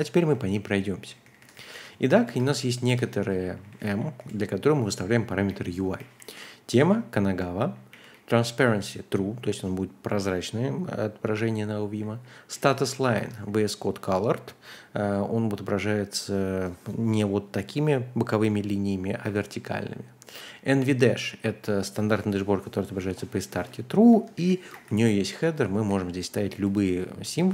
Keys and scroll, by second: 0.0-8.6 typing, 2.8 Escape, 11.6-13.8 typing, 13.1 Escape, 20.2-20.5 typing, 23.5-26.2 typing, 24.1 Escape.